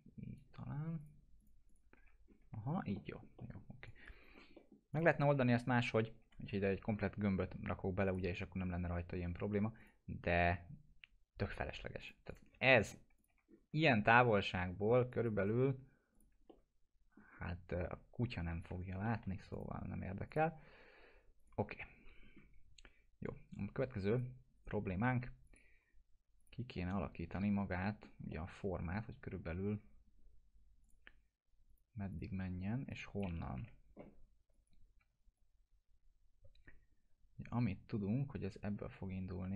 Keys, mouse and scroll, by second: 1.9 F4, 2.2-2.8 scroll down 2, 2.9 alt+middle click, 3.8 click, 4.2 scroll up 1, 4.5 middle click, 4.9 click, 5.3 scroll up 1, 6.2 F4, 6.7 scroll up 1, 8.0 click, 12.4 scroll down 1, 13.2 click, 13.3 F4, 13.4 scroll down 1, 15.1 click, 15.4 right click, 16.1 click, 16.8-17.4 alt+middle click, 17.4 scroll up 1, 18.7 alt+q, 19.0 alt+middle click, 19.5 click, 21.7 F4, 24.1 click, 24.5 right click, 25.4 click, 25.8 scroll down 1, 26.4 click, 26.7 middle click, 27.0 scroll down 1, 27.8 middle click, 28.1 scroll down 1, 28.3-29.5 alt+middle drag, 29.6 scroll up 1, 30.8 click, 33.6 Delete, 34.5 click, 35.0 w, 35.3-39.5 drag.